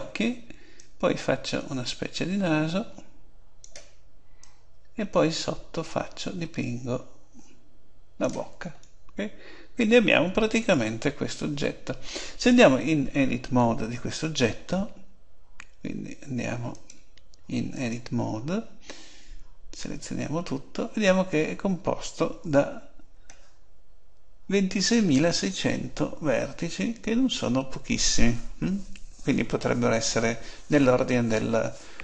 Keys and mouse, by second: 0.8-2.5 drag, 4.4-6.2 drag, 8.8-14.5 middle drag, 16.7 click, 17.5-18.6 drag, 19.8 a, 22.4 a.